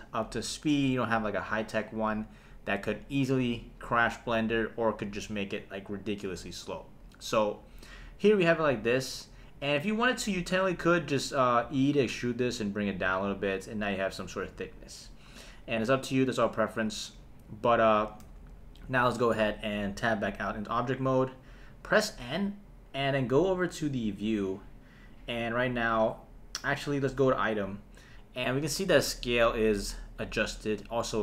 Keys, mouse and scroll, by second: 11.6 e, 12.9 click, 18.2 Tab, 21.9 n, 24.1 click, 26.8 click.